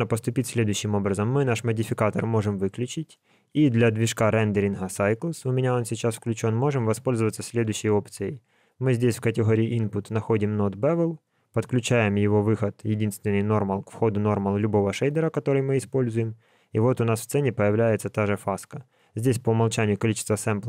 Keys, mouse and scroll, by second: 1.2 click, 3.8 click, 7.9 shift+a, 12.8 click.